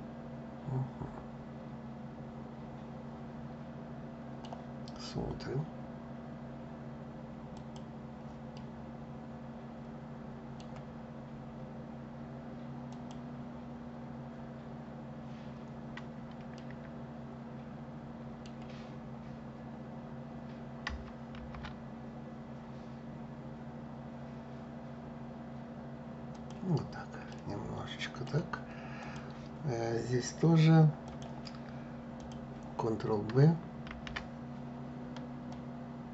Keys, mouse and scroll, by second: 7.2 click, 8.2-11.2 middle drag, 12.6 click, 16.2-19.2 middle drag, 21.0 ctrl+b, 27.0-28.7 middle drag, 28.7 click, 30.7 click, 31.9 click, 33.6 ctrl+b, 35.2 click.